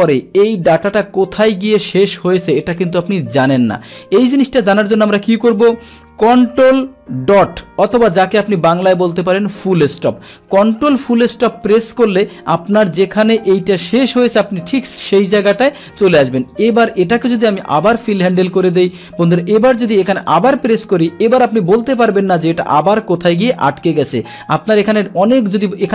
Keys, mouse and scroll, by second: 11.1 scroll down 1, 16.4 click, 17.6-18.8 scroll down 1, 18.8-19.9 scroll up 1, 19.9-20.2 scroll up 1, 20.2 click, 20.4 click.